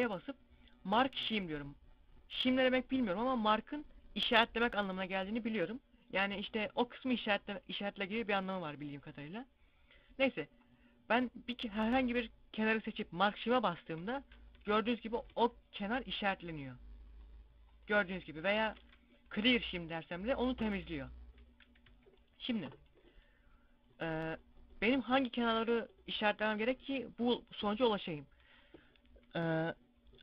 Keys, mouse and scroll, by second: 13.9-14.5 scroll up 2, 14.4 Tab, 14.8 scroll down 2, 14.9 Tab, 15.2 a, 15.7 scroll up 1, 16.4 right click, 18.7 ctrl+e, 21.4-21.7 scroll down 3, 21.7 z, 22.1 middle click.